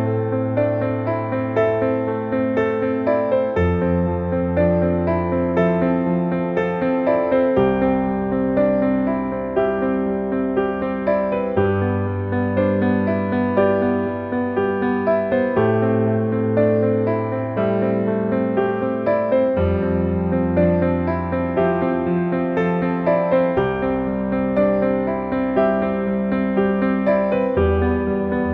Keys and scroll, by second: 2.6 s, 3.5 d, 10.0 a, 17.8 a, 18.4 s, 25.6 d.